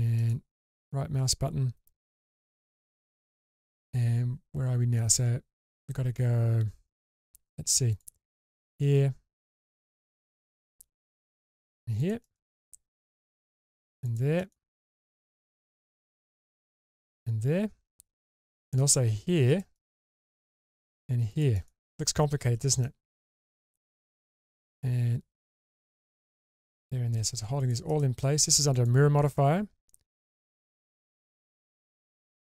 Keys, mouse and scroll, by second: 22.8-32.4 shift+middle drag.